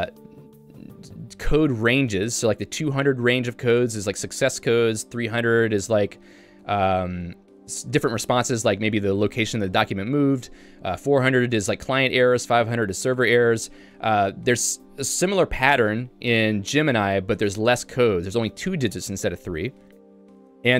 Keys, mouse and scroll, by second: 20.2 j.